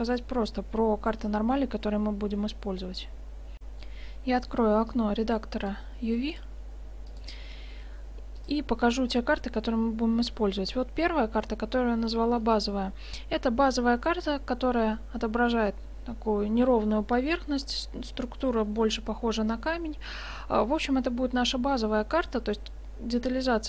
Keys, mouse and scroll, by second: 3.6 F9, 5.0-8.3 drag, 8.5-10.3 drag, 11.7-15.1 middle drag, 18.2-19.6 middle drag, 19.7-22.1 middle drag.